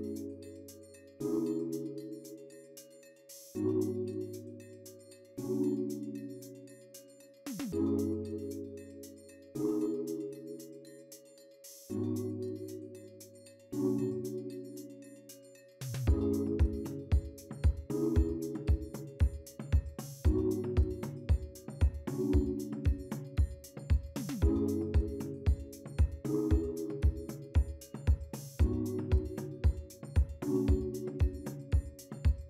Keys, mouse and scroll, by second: 1.0-1.5 scroll up 1, 1.5 scroll down 1, 4.7-5.0 scroll down 1, 5.0 middle click, 6.1 double click, 6.4 right click, 15.4 right click, 26.9-27.4 scroll up 2, 27.5-28.6 scroll down 3.